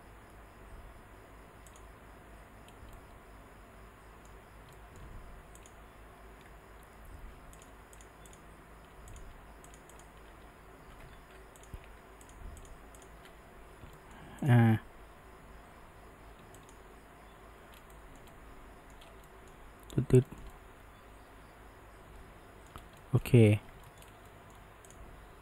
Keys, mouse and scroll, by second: 3.0-5.6 middle drag, 5.6 click, 7.6 shift+drag, 8.0 shift+click, 8.3 shift+drag, 9.1 click, 9.7 shift+click, 10.0 shift+drag, 10.4 f, 11.2 ctrl+z, 11.6 drag, 12.3 shift+click, 12.6 shift+click, 13.0 shift+drag, 13.3 f, 14.0-14.5 shift+middle drag, 14.5 click, 15.0 g, 17.9-19.0 shift+middle drag, 19.0 scroll, 19.3-22.8 middle drag, 22.8 scroll, 23.0-24.1 shift+middle drag, 24.1 scroll, 24.3-24.9 middle drag, 24.9 click, 25.2 g.